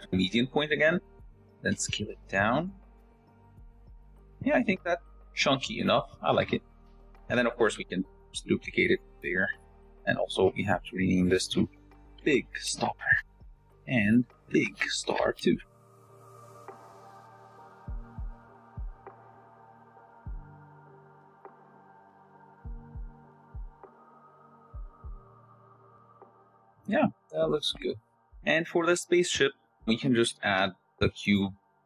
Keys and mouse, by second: 2.0 s, 4.5 Tab, 5.1 s, 6.0 shift+middle drag, 6.6 s, 7.8 click, 8.7 shift+d, 9.8 r, 10.0 s, 10.6 g, 11.9 click, 12.2 click, 12.8 click, 14.5 click, 14.9 click, 16.4 shift+drag, 17.8 shift+d, 18.8 s, 19.7 r, 20.0 g, 22.6-24.8 drag, 23.4 BackSpace, 25.4 shift+click, 26.4-26.8 shift+drag, 27.2 shift+click, 30.7 shift+a, 31.7 g.